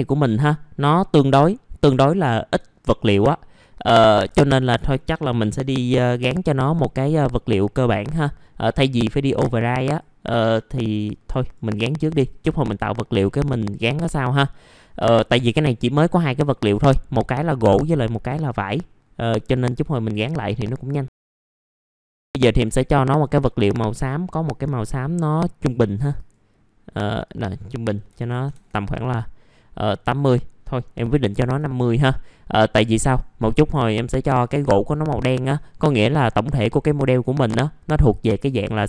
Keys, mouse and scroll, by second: 0.9 middle click, 2.9 alt+middle click, 3.7-4.2 scroll up 1, 4.2 alt+middle click, 5.2 F4, 6.0 middle click, 6.9 middle click, 8.1 middle click, 9.7-11.3 drag, 11.3 middle click, 11.5-11.9 scroll down 1, 11.9 middle click, 13.2 click, 22.4 middle click, 22.9-23.2 scroll up 1, 23.4 click, 24.2-28.4 drag, 28.4 click, 29.3 KP_8.